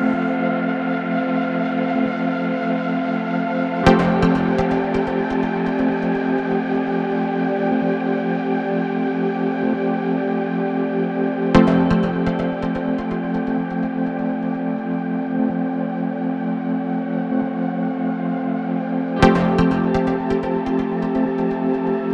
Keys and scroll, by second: 0.9 ctrl+d, 1.2 Escape, 4.6 3, 4.9 ], 7.4 4.